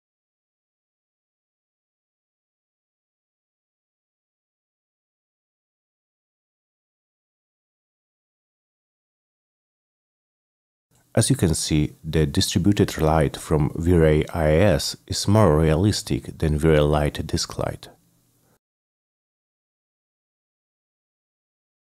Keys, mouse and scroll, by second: 0.1-1.3 drag, 1.6 click, 2.1 click, 2.4 click, 2.6 ctrl+v, 2.8 Return, 3.0 click, 3.2 click, 3.4 click, 3.5 click, 3.5-5.5 typing, 4.4 middle click, 5.0 middle click, 5.1 middle click, 5.3 middle click, 5.7 click, 6.2 middle click, 6.7-7.7 drag, 7.8 click, 7.9 c, 8.1 F3, 8.4 F9.